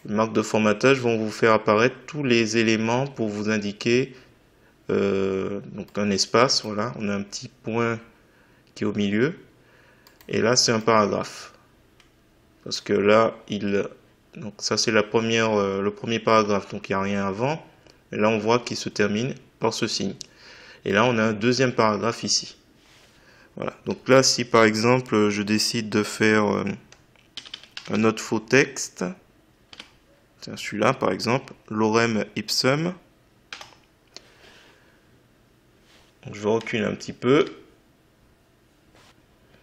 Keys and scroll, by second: 27.1-28.4 typing, 29.6 m, 33.4 F3.